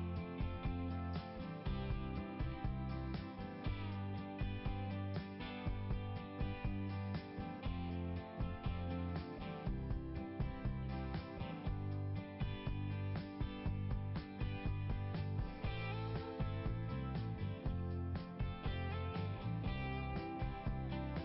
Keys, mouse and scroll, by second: 0.7-1.3 scroll up 1, 2.8 scroll down 1, 3.5 click, 9.7 click, 11.5 click, 13.1 click, 15.3 click.